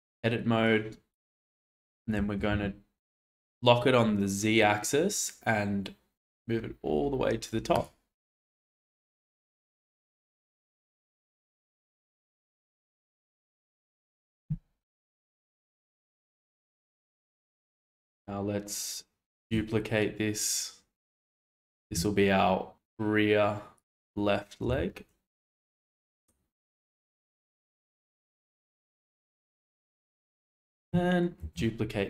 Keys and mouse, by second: 0.6 click, 0.9 click, 2.1 g, 2.4 z, 7.7 click, 10.5 middle click, 12.9 Tab, 13.5 shift+middle drag, 16.5-17.2 shift+middle drag, 19.3 shift+d, 21.7 r, 24.7 g, 29.3-29.7 shift+middle drag, 30.6 click, 31.4 shift+d.